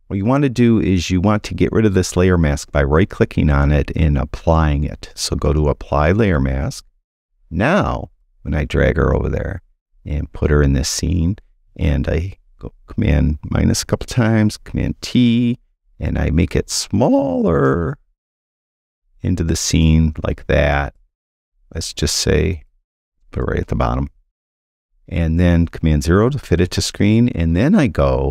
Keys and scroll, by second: 13.0 super+-, 14.6 super+t, 26.5 super+0.